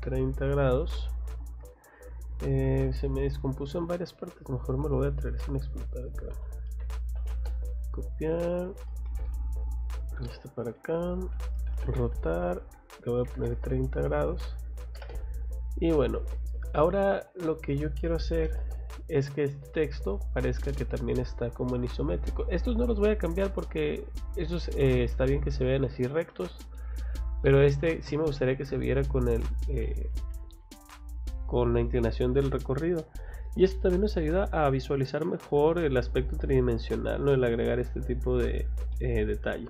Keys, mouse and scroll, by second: 0.8-1.2 scroll down 1, 1.2 scroll up 1, 1.8 click, 2.0 click, 2.6 Escape, 3.0 click, 3.2 click, 4.3-4.7 scroll down 4, 5.3-5.8 scroll up 2, 6.0 click, 6.8 c, 7.2 o, 7.3 space, 7.9 click, 8.1 scroll down 2, 8.9 middle click, 10.0 click, 10.2 Escape, 10.3 click, 10.5 click, 11.3 r, 11.7 o, 11.8 space, 12.1 click, 14.7 space, 14.8 m, 15.0 space, 15.9 click, 16.6 click, 16.9 Escape, 17.4 click, 18.4 m, 18.5 space, 18.9 click, 19.8 click, 20.1 scroll down 2, 20.5 scroll up 2, 21.7 scroll up 2, 24.0 scroll down 1, 24.9 middle click, 25.8 middle click, 26.4 scroll down 1, 26.7 middle click, 27.5-30.3 scroll up 1, 34.4-34.8 scroll down 2, 37.9 middle click, 38.9 middle click.